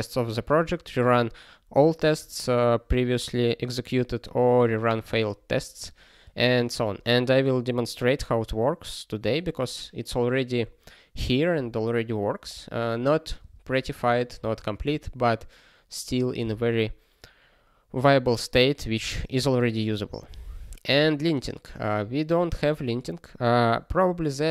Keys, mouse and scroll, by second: 6.2 ctrl+space, 6.7 ctrl+a, 12.4 ctrl+g, 13.4 ctrl+space, 13.5 ctrl+n, 13.8 ctrl+p, 14.5 ctrl+space, 14.9 ctrl+n, 16.4 ctrl+g, 19.9 ctrl+space, 20.0 ctrl+n, 20.8 ctrl+p.